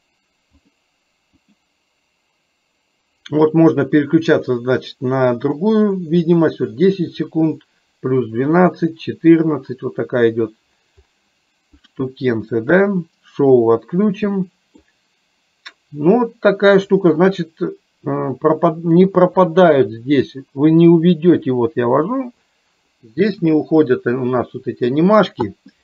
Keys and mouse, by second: 0.8 click, 11.8-13.0 drag, 14.5 middle click, 19.1-25.0 middle drag.